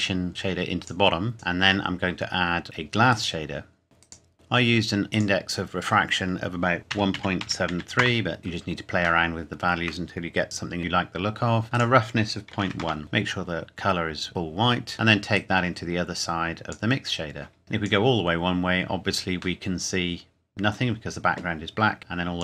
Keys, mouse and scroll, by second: 5.1 click, 6.9 KP_1, 7.1 KP_Decimal, 7.4 KP_7, 7.7 KP_3, 8.0 KP_Enter, 9.2 shift+middle click, 9.8 shift+scroll down 1, 11.2-11.7 scroll up 1, 11.7 click, 12.5 KP_Decimal, 12.6 KP_1, 12.8 KP_Enter, 13.0 click, 15.3 click, 18.9-19.6 scroll down 2, 19.6 middle click, 22.0 click.